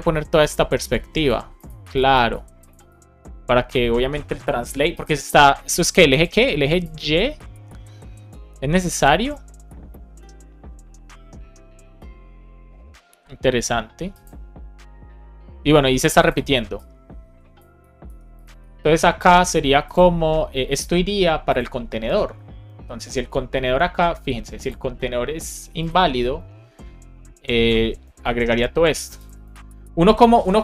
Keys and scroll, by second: 18.0 super+c, 27.8 Return, 28.2 super+v.